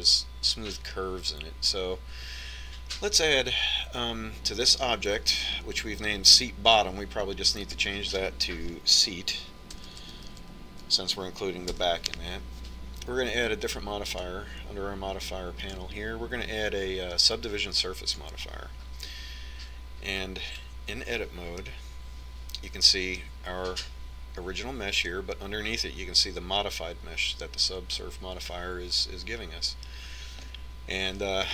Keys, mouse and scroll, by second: 7.8-9.7 drag, 10.0 BackSpace, 10.1 BackSpace, 14.3-17.6 drag, 21.8-23.7 middle drag.